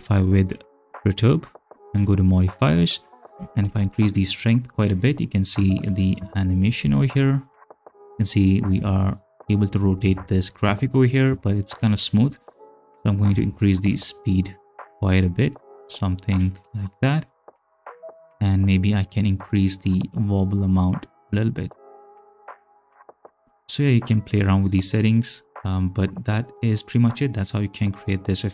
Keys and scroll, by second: 6.8 ctrl+space, 18.2 space, 22.0 space, 23.9 space.